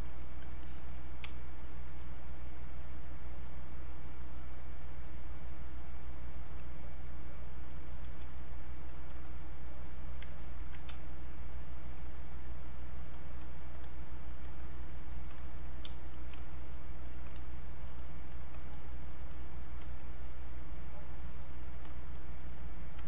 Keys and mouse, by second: 0.6 alt+click, 1.3 space, 1.6 click, 1.8 space, 2.8 click, 7.7 space, 8.0 click, 10.9 space, 11.2 click, 11.4 space, 12.2 click, 13.2 shift+click, 14.6 shift+click, 15.9 space, 16.1 click, 20.0-22.1 shift+drag.